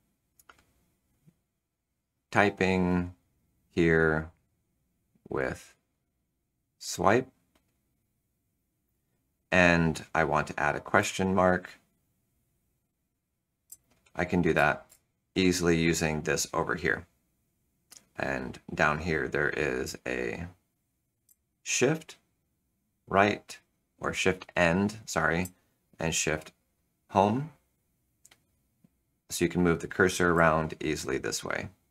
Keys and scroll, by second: 11.0 shift+/, 13.6 shift+/, 14.5 Return, 14.8 Return, 22.1 shift+End, 26.2 shift+Home, 29.0 End, 29.0 Home, 31.6 End.